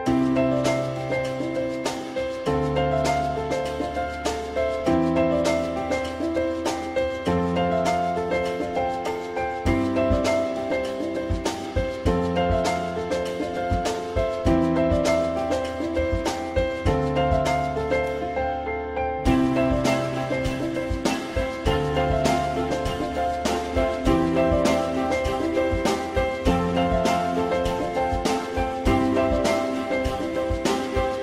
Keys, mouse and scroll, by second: 3.6 alt+middle click, 6.9 alt+middle click, 9.8 F4, 10.5 alt+middle click, 16.3 click, 16.3 w, 19.0 alt+middle click, 22.4 alt+middle click, 28.5 ctrl+z, 30.9 alt+middle click.